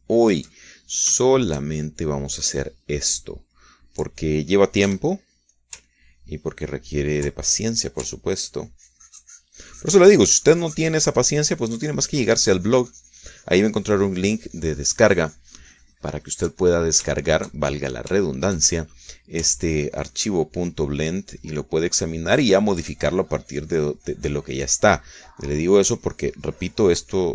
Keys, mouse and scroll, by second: 2.0-4.0 ctrl+shift+middle drag, 4.2 middle click, 5.0 middle click, 6.3 f, 7.0 ctrl+click, 7.3-9.3 ctrl+drag, 9.5-20.6 ctrl+drag, 21.1-26.7 ctrl+drag, 26.9-27.3 drag.